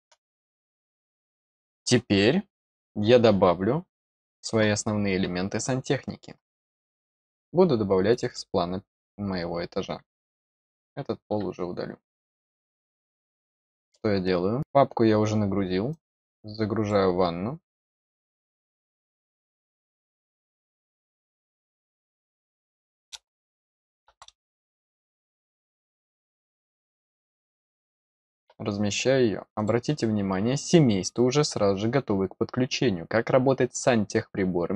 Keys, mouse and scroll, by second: 8.0 click, 8.2 click, 9.5 scroll up 1, 10.1 click, 12.2 scroll up 1, 12.8 middle click, 15.8-16.8 drag, 27.1 click, 29.5 click.